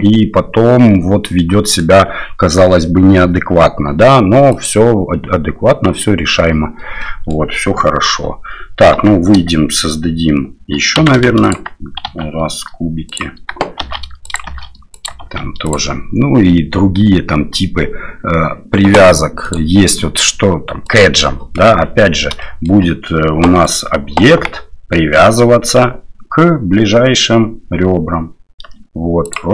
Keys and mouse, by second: 1.4 middle click, 4.5 click, 7.0 middle click, 8.1 KP_7, 8.9 Tab, 11.0 x, 12.2 shift+a, 13.8 shift+d, 14.5 shift+d, 15.2 shift+d, 19.5-21.4 drag, 22.4 shift+middle drag, 23.6 right click, 24.4 g.